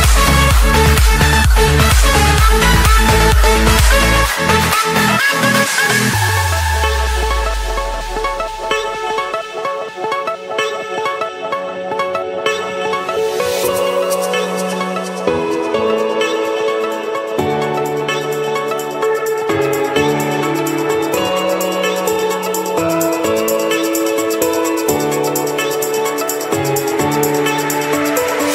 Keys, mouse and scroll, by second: 1.1 click, 1.4-2.1 scroll, 2.2 Escape.